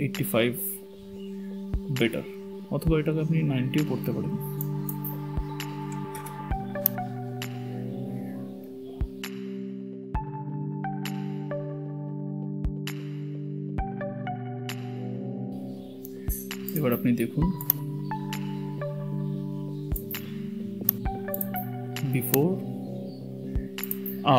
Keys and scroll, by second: 7.6 KP_9, 7.8 KP_0, 12.0 Return.